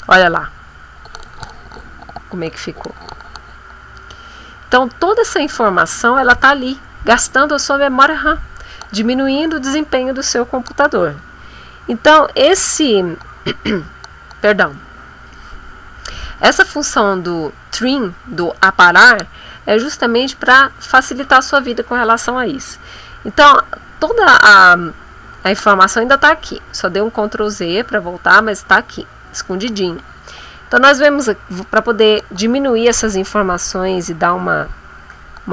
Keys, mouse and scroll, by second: 20.5 ctrl+z, 25.3 click.